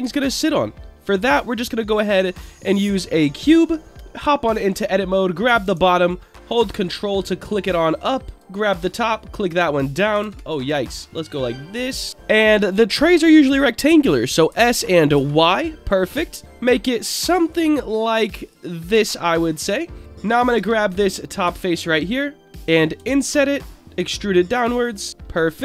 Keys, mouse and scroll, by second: 0.1 shift+a, 3.9 Tab, 4.0 middle click, 4.7 click, 5.2 middle click, 6.0 ctrl+click, 6.9 middle click, 8.1 middle click, 8.3 click, 8.9-9.9 drag, 10.2 ctrl+z, 11.0-12.1 drag, 12.1 middle click, 12.1 a, 14.5 s, 15.1 x, 17.2 y, 18.7 click, 18.9 Tab, 19.1-19.7 scroll up 5, 20.0 drag, 20.0 scroll down 2, 20.3 click, 20.5 Tab, 20.8 click, 21.3-21.8 scroll up 2, 21.9 shift+middle click, 23.6 click, 23.9 e, 24.8 click, 25.2 middle click.